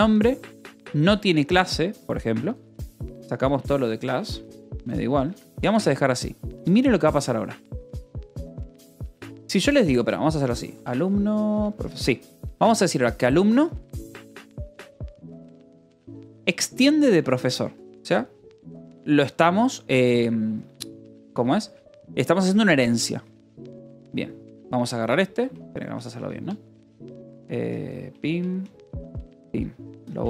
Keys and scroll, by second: 0.0-6.2 typing, 1.0 Escape, 5.9 ctrl+s, 7.7-17.7 typing, 17.8 Escape, 19.5 j, 21.1 k, 23.9-24.7 typing, 27.9 shift+v, 29.5 shift+5, 29.8 d, 30.0 Escape.